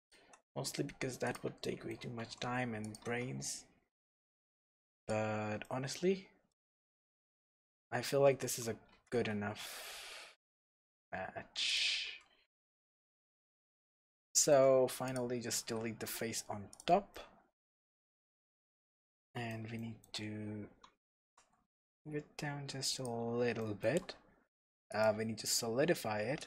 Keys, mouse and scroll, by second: 0.1 click, 1.3 s, 1.3 click, 1.6-3.0 shift+middle drag, 2.2 e, 3.0 click, 3.0 s, 5.1 click, 5.3 scroll down 1, 5.6 middle click, 6.7 a, 7.6 g, 8.4 Escape, 8.9 s, 11.8 click, 12.1 Escape, 12.3 Tab, 12.7-13.1 scroll down 2, 13.1-13.4 scroll up 2, 13.4-13.7 middle drag, 13.7 Tab, 14.6 middle click, 15.1 click, 15.6 x, 17.1-23.1 middle drag, 18.4 scroll up 1, 19.6 scroll down 1, 20.7 Tab, 21.2 g, 23.1 click, 23.6-24.9 shift+middle drag, 24.9-26.4 drag.